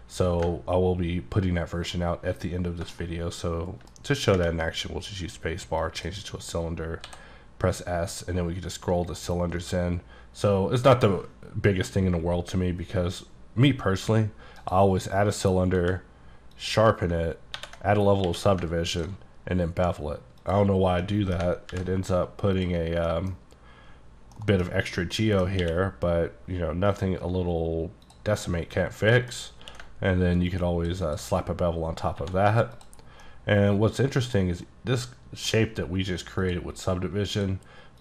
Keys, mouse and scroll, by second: 0.7-1.5 ctrl+scroll down 4, 1.5-2.0 ctrl+scroll up 1, 2.0-2.9 scroll up 1, 2.9 shift+scroll up 1, 3.0 shift+middle click, 5.9 click, 7.1 s, 7.4-8.1 scroll down 3, 8.1 scroll down 7, 9.0 scroll up 2, 9.6-10.0 scroll down 8, 10.0-10.7 scroll up 4, 10.7 scroll up 1, 11.3-13.2 scroll up 17, 13.2-14.3 scroll down 4, 14.7 click, 15.9 q, 16.6 click, 17.6 ctrl+1, 18.3 q, 19.0 ctrl+click, 19.5-20.1 scroll down 8, 20.5 click, 21.1 middle click, 21.7 alt+middle click, 21.8 alt+v, 22.6 click, 23.0-24.4 scroll up 5, 23.2 middle click, 24.4 middle click, 25.2 scroll down 1, 25.2 middle click, 25.7 q, 28.1 click, 28.5 middle click, 29.5 scroll up 2, 29.9 ctrl+q, 30.6 ctrl+click, 31.1 ctrl+click, 32.0 scroll up 2, 32.3 1, 32.8 click, 33.1 scroll down 3, 33.3 middle click, 35.1 middle click, 36.5 click, 37.4 click.